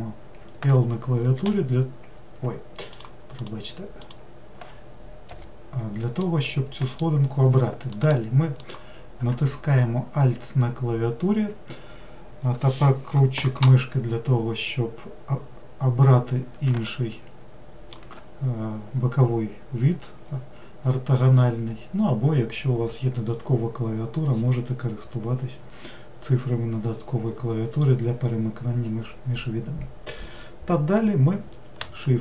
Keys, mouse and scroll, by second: 2.9 click, 3.4 click, 4.0 click, 5.3 l, 6.2-8.0 middle drag, 8.6 alt+middle click, 16.9-20.0 shift+middle drag.